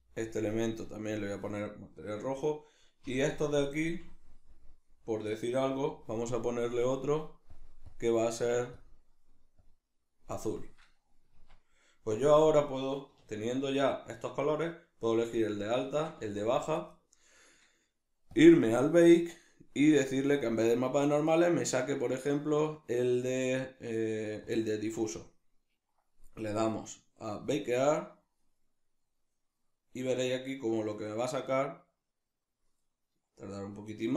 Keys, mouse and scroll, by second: 1.1-2.5 drag, 2.5 right click, 3.1 l, 6.6-7.7 drag, 7.9 click, 11.3 Tab, 13.1 \, 15.8 shift+right click, 16.2 z, 18.3 drag, 18.9-20.3 middle drag, 20.3-28.0 drag.